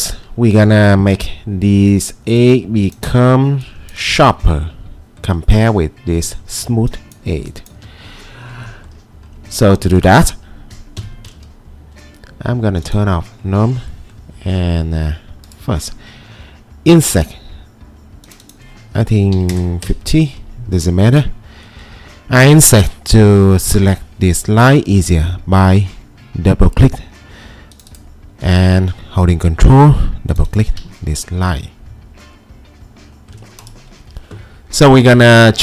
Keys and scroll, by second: 1.0 ctrl+2, 4.1 Escape, 6.6 ctrl+2, 7.8 Escape, 11.0 4, 19.1-20.0 typing, 24.2 2.